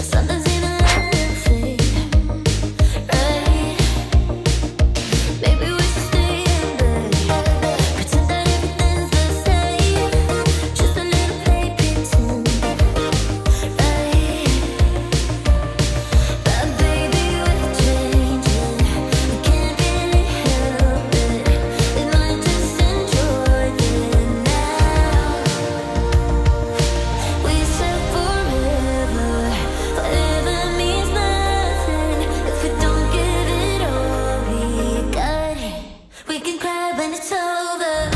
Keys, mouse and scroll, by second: 0.2 space, 0.7 click, 2.1 click, 3.8-11.7 ctrl+drag, 11.7 ctrl+z, 12.8-20.1 drag, 20.1 space, 21.0 space, 21.5 click, 23.6-25.5 typing, 30.1 space, 30.9 click, 31.5 ctrl+d, 33.0 click, 35.6-36.6 typing, 37.5 Return.